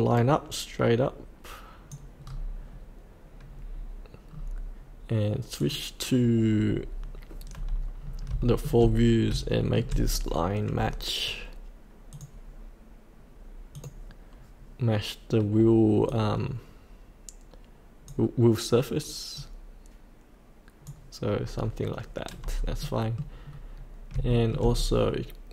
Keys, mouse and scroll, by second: 2.2-2.5 scroll up 1, 4.3-5.6 scroll down 1, 5.6 click, 7.5-8.3 scroll up 1, 8.4 shift+middle click, 9.2 scroll up 1, 9.5 shift+middle click, 10.1-12.1 scroll down 1, 12.1-13.2 drag, 14.4-18.3 drag, 20.4 click, 21.4 scroll up 1, 22.8 middle click, 23.4 scroll down 1, 24.3 shift+middle click, 24.7-25.5 scroll down 1.